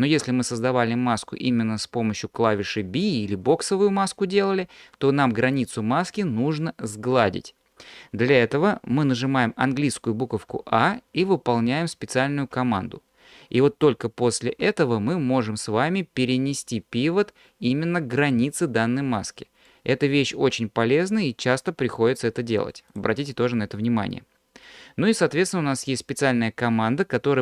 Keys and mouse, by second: 10.5 a, 14.5 q, 19.7-22.7 drag, 22.7 middle click.